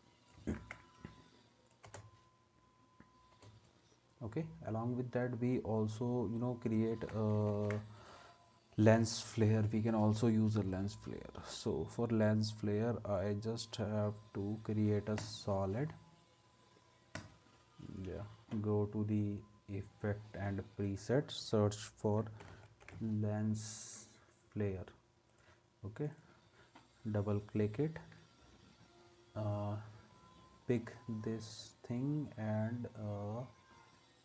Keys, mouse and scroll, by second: 0.6 ctrl+s, 1.9 space, 3.4 space, 6.9 ctrl+s, 7.5 ctrl+a, 22.3-23.5 typing.